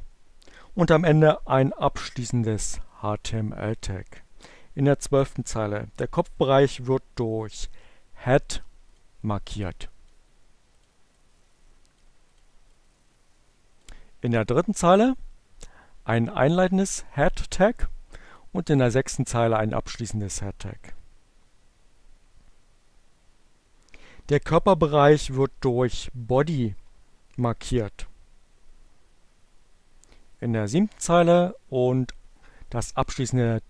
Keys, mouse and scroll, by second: 2.6-3.9 drag, 8.6 click, 8.9-10.0 drag, 10.5 click, 10.8-12.0 drag, 12.2 click, 13.0-14.2 drag, 18.1 click, 29.4 click, 31.2-32.5 drag.